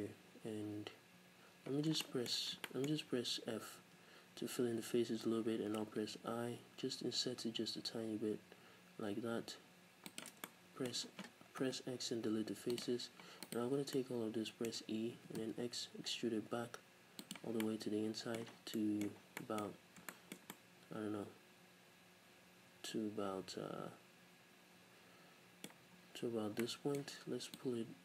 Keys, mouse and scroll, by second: 0.4-1.5 scroll down 1, 1.5 scroll down 1, 1.7-2.6 scroll up 4, 3.3-4.1 scroll up 2, 4.1 f, 5.7 i, 10.2 shift+click, 11.0-11.6 scroll down 2, 11.6 KP_Decimal, 12.1 x, 13.4 alt+right click, 13.9-17.4 middle drag, 15.3 e, 17.4 click, 17.4 scroll down 2, 17.6 middle click, 18.5 scroll down 2, 18.7 middle click, 19.2 scroll down 2, 19.4 middle click, 19.6-20.1 scroll up 2, 20.1-27.6 shift+middle drag, 25.8-26.6 scroll up 2, 27.6-28.0 drag.